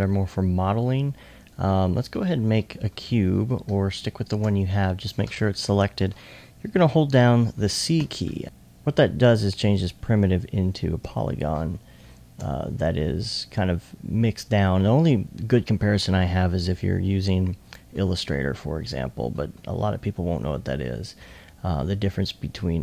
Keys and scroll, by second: 3.1 s, 8.0 c, 11.1 c.